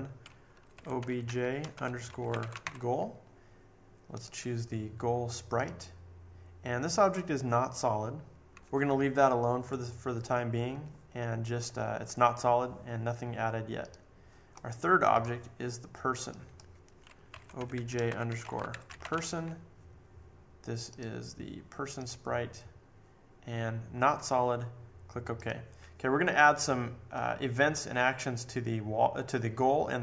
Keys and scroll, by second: 0.5-3.1 typing, 17.0-19.5 typing.